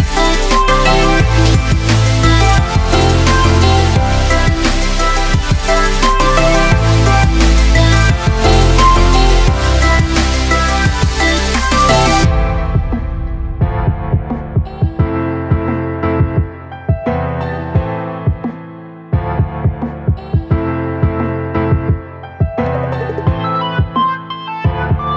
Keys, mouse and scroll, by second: 0.2 space, 1.4-8.0 alt+drag, 8.0-11.0 alt+drag, 14.3 shift+click, 18.5 shift+right click, 20.7 click.